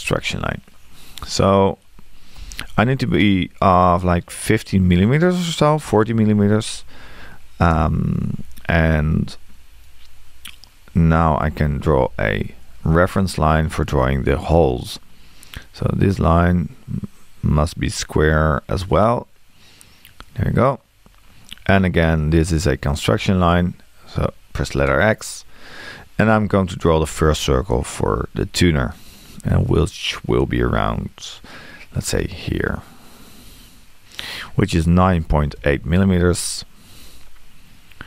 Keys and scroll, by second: 0.0 x, 6.1 1, 11.4 l, 21.5 Escape, 27.1 c, 35.0 9.